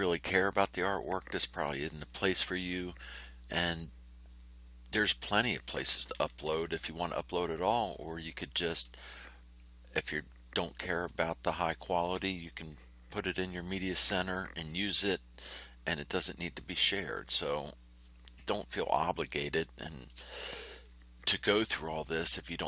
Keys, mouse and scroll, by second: 9.6-10.8 drag, 19.3 click.